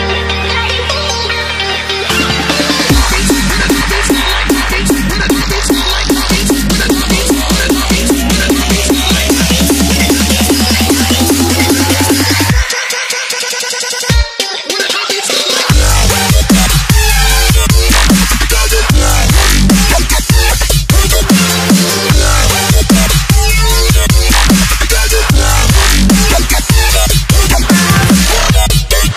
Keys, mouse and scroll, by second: 3.5 z, 4.3 c, 5.3 c, 5.5 click, 5.9 v, 6.5 ctrl+t, 6.9 click, 8.7 Return, 9.9 click, 18.5 scroll down 1, 19.8 click, 21.3 Delete, 23.1 scroll up 1, 24.8 click.